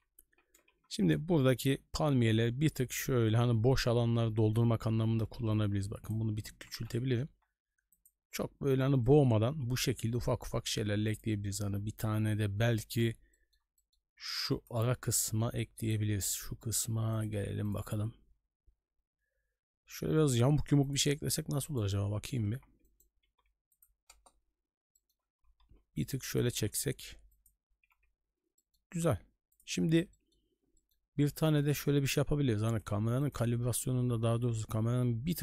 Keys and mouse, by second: 0.3 g, 4.4 shift+middle drag, 5.3 s, 6.3 g, 9.0-9.3 shift+middle drag, 9.8 shift+middle drag, 11.1 click, 13.3 middle drag, 13.8 shift+middle click, 14.3 shift+b, 15.2 middle click, 15.6 shift+middle click, 17.1-22.0 drag, 22.4 b, 23.2 s, 24.1 KP_0, 24.9 shift+middle drag, 25.3 g, 26.5 s, 27.8 a, 27.9 a, 28.6 shift+middle drag, 29.5 click, 30.1 middle click, 30.7 middle drag, 31.4 shift+middle drag, 32.7-35.4 drag.